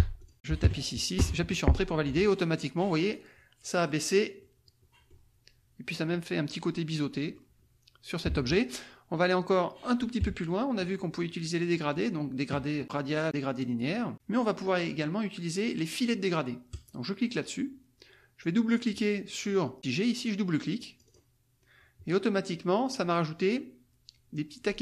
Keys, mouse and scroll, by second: 0.1 click, 0.4 Delete, 0.6 KP_6, 1.1 Return, 4.4 click, 6.7 click, 8.3 alt+Tab, 10.2 KP_Subtract, 11.2 click, 16.7 click, 18.6 click, 20.7-21.8 drag.